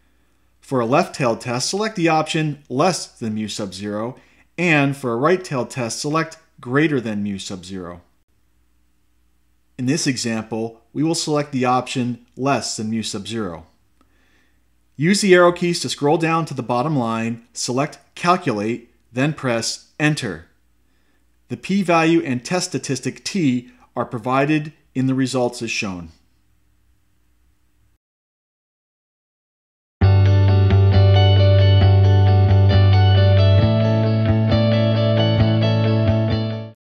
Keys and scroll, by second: 0.9 Right, 4.9 Right, 8.8 Left, 9.9 Left, 18.1 Down, 18.7 Down, 21.4 Return.